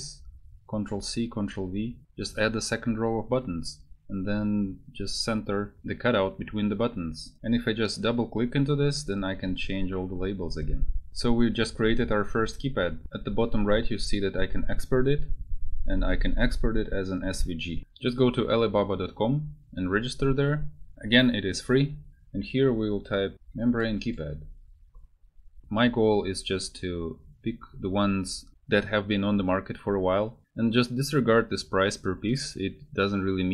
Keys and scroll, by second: 7.4 1, 8.5 2, 9.8 3, 11.1 4.